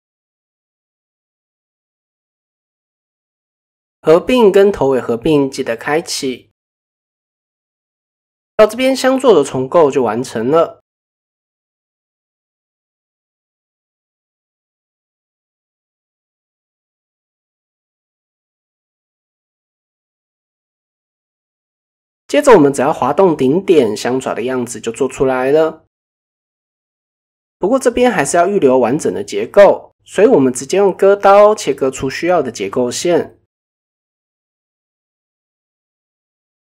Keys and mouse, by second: 0.2 click, 0.6 click, 1.5 click, 2.9 click, 3.3 click, 4.4 click, 5.8 click, 6.0 click, 7.5 Tab, 7.8-8.3 middle drag, 8.6-9.8 middle drag, 10.2 KP_1, 11.0-11.3 shift+middle drag, 11.9 click, 12.8 click, 14.2 click, 14.9-15.5 middle drag, 16.1 KP_1, 16.7 ctrl+KP_1, 17.7 shift+middle drag, 19.2-19.6 middle drag, 21.2 middle click, 25.4 g, 28.9 ctrl+z, 29.6 KP_1, 30.1 ctrl+KP_1, 31.3 click, 32.7 k.